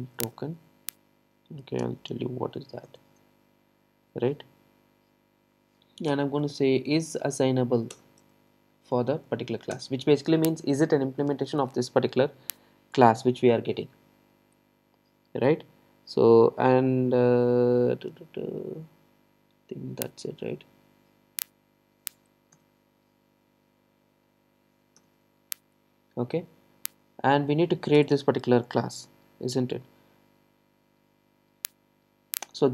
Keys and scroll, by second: 7.9 Return, 28.0 alt+Return.